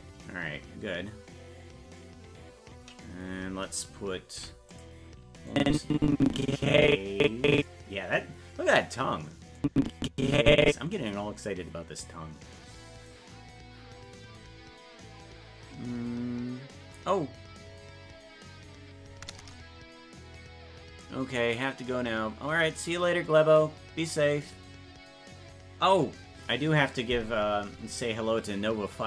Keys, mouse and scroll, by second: 5.5-7.7 drag, 9.6-10.7 drag.